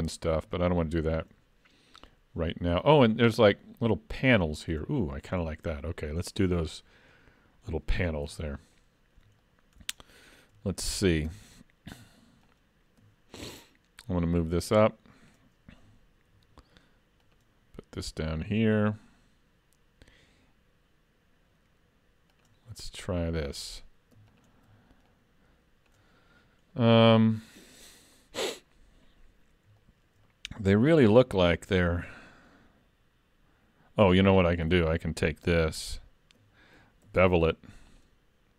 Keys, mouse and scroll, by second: 0.9 shift+middle click, 2.8 scroll up 4, 3.1 shift+middle click, 5.4 scroll up 2, 5.8 shift+middle click, 6.3 middle click, 8.3 Tab, 8.8 middle click, 9.4 shift+middle click, 10.1 middle click, 10.6 shift+middle click, 13.1 alt+click, 13.7 click, 16.3 ctrl+r, 22.8 middle click, 24.3 alt+click, 25.1 click, 27.5-28.2 scroll up 1, 28.2-29.6 scroll up 1, 29.8 shift+middle click, 30.3 scroll up 2, 31.7 ctrl+r, 35.8 alt+click, 37.1 ctrl+e.